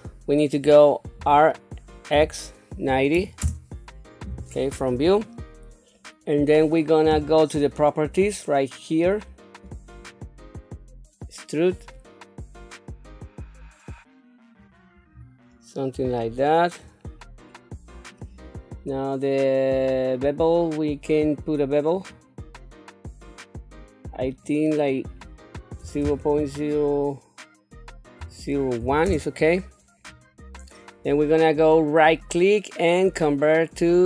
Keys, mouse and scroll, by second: 1.0 r, 4.6 KP_1, 5.8 middle click, 9.5 ctrl+z, 9.8-14.5 drag, 14.9-15.8 scroll up 2, 16.0 shift+middle click, 16.9 scroll down 1, 17.3 middle click, 21.8 click, 24.1 click, 24.7-28.9 drag, 31.9-34.0 right drag.